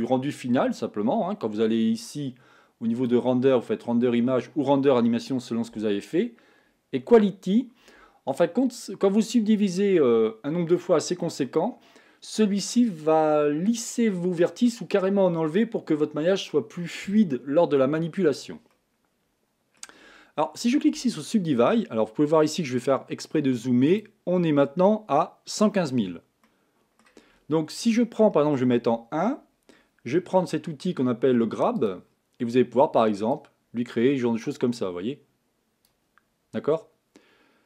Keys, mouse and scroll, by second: 23.8 middle click, 26.1 click, 26.5-28.7 middle drag, 28.7 KP_1, 31.8-36.6 drag, 36.6-37.6 middle drag.